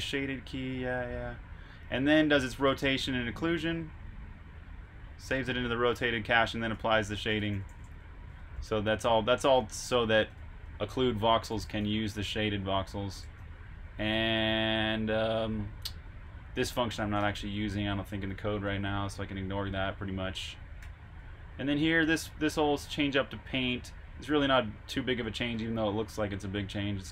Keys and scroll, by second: 0.0-1.5 typing, 2.6-8.2 typing, 14.0 typing, 15.8 j, 16.9-21.7 typing, 22.8 j, 24.9-26.9 typing.